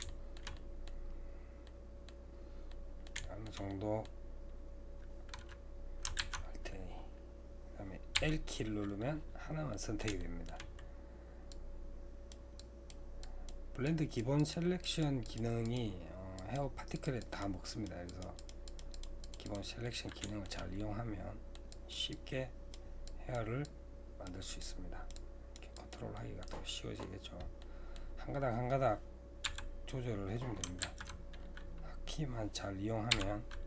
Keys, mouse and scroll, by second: 0.1-1.1 shift+middle drag, 1.1-1.7 scroll up 2, 1.7 middle click, 2.3-2.7 scroll down 2, 2.7-6.2 middle drag, 6.2 alt+a, 8.2 l, 9.7-11.5 middle drag, 11.5-19.8 drag, 19.8-21.7 middle drag, 21.7-26.2 drag, 26.2-30.2 middle drag, 29.5 typing, 30.8 alt+a.